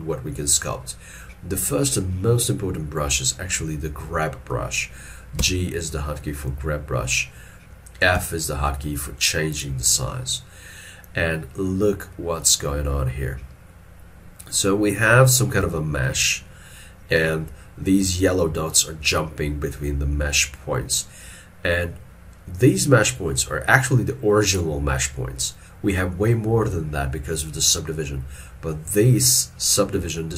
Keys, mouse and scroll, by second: 5.4 g, 12.2 middle click, 15.7 alt+e.